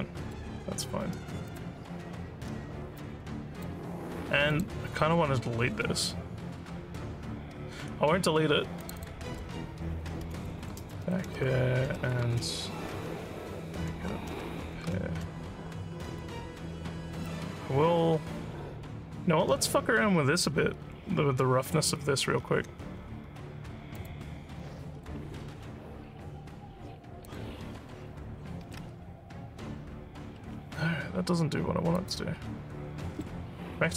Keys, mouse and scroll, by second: 1.5 click, 3.0 alt+click, 4.5 click, 9.0 click, 10.1-15.3 typing, 19.3 middle click, 19.4 scroll down 1, 20.0 scroll down 1, 22.4-23.0 scroll up 5, 24.0 click, 24.6-25.0 scroll down 4, 27.2 click, 31.9 click.